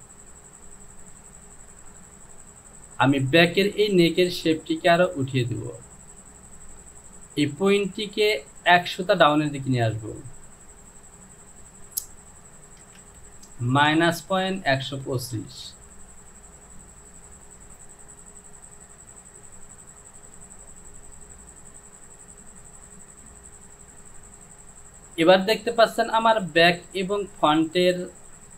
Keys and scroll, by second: 12.9 KP_0, 13.1 Down, 13.8 KP_Subtract, 14.3 KP_Decimal, 14.8 KP_1, 15.1 KP_2, 15.4 KP_5, 15.7 Down.